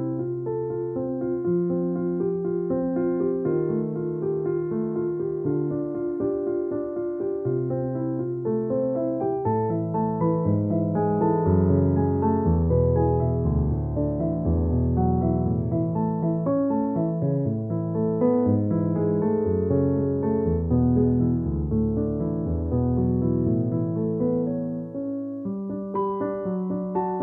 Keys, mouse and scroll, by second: 0.3 ctrl+=, 1.8-3.5 typing, 2.1 click, 4.7 space, 15.7 space, 15.9 click, 16.1 space, 17.1 ctrl+-, 18.9 space, 19.2 click, 19.3 space, 19.9 ctrl+=, 21.6 space, 21.8 click, 21.9 space, 26.1 click.